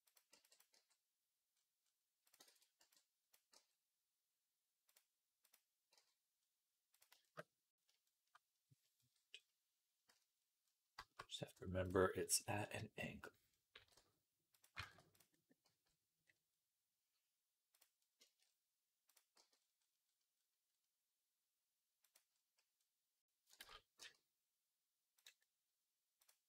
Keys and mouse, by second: 0.2 b, 0.6 g, 2.4 ctrl+z, 2.6 b, 3.4 g, 5.8 g, 9.9 z, 11.0-12.1 middle drag, 12.2-26.4 middle drag, 13.7 g, 14.7 ctrl+z, 15.5 g, 19.2 g, 23.5 ctrl+z, 23.8 g.